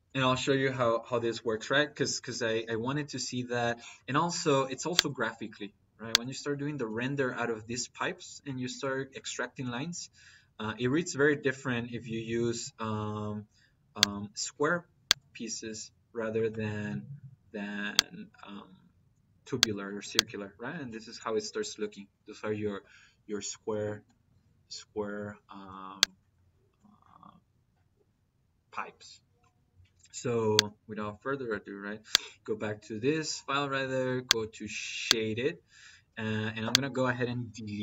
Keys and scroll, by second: 37.4 Delete.